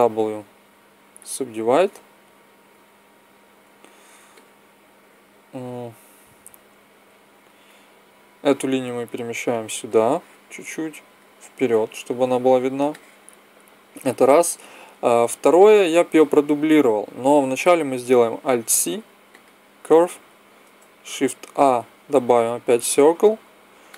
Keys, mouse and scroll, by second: 2.5 Tab, 4.2 middle click, 8.4-9.8 drag, 9.8 middle click, 11.9 click, 12.7-13.7 middle drag, 18.3 alt+c, 21.3 shift+a, 23.8 middle click.